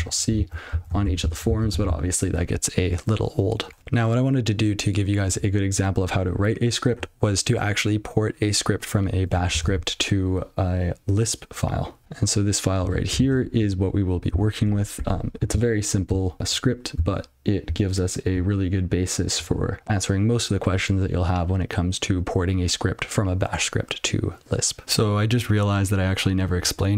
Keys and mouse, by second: 0.8 ctrl+n, 1.0 ctrl+c, 3.8 click, 12.0 super+l, 14.3 alt+<, 15.5-15.9 ctrl+n, 16.4 ctrl+p, 16.9-17.2 ctrl+n, 18.3-19.3 ctrl+p.